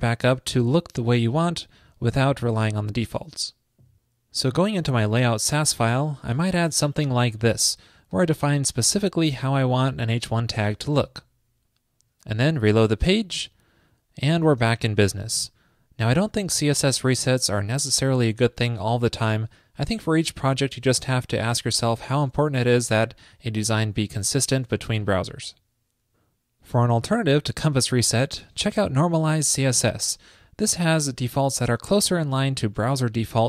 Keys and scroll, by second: 6.9 super+v, 11.2 super+s.